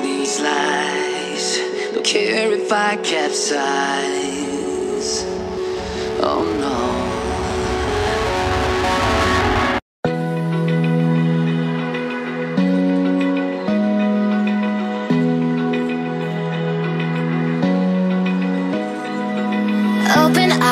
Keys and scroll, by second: 0.2 ctrl+BackSpace, 4.4 ctrl+z.